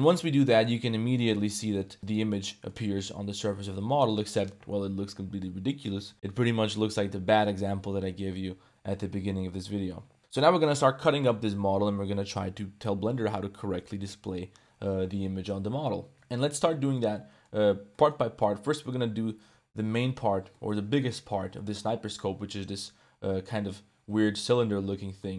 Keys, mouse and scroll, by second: 0.1-1.5 middle drag, 1.5 ctrl+s, 1.8-2.7 middle drag, 3.1 middle drag, 3.8 middle drag, 16.1 Tab, 16.3 a, 16.7 ctrl+s, 17.2 click, 17.9 click, 18.6 click, 19.8 l, 20.0 click, 20.5 click, 21.5 click, 21.6 middle click, 25.2 middle click.